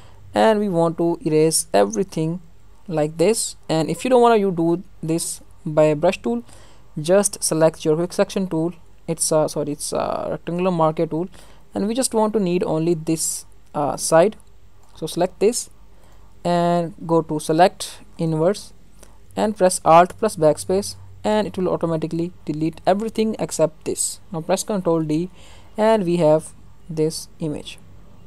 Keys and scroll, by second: 20.0 alt+BackSpace, 24.8 ctrl+d.